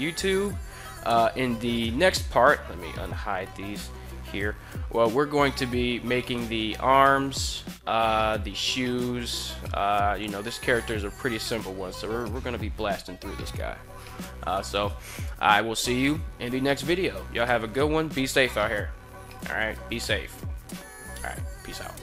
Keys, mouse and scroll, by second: 3.0 alt+h.